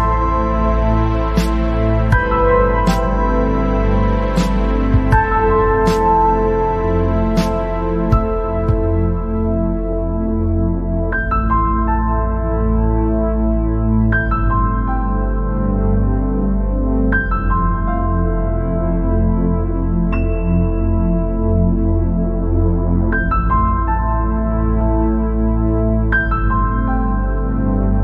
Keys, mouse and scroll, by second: 0.3-0.9 scroll up 5, 1.2 scroll down 1, 1.3-2.5 middle drag, 2.5-5.8 drag, 5.8 scroll down 3, 6.0 middle click, 6.9-7.7 scroll up 6, 7.9 scroll down 2, 8.8-14.3 drag, 14.3-14.7 scroll down 2, 15.0 scroll up 1, 15.9-18.5 drag, 18.5 scroll down 3, 18.8 middle click, 19.7-20.6 scroll up 5, 20.6 scroll down 1, 20.8-22.3 middle drag, 22.3-24.5 drag, 24.5 middle click, 24.8 scroll down 2, 25.0 middle click, 25.8-26.2 scroll up 3, 26.2 scroll down 1, 26.4-27.9 middle drag, 27.9 click.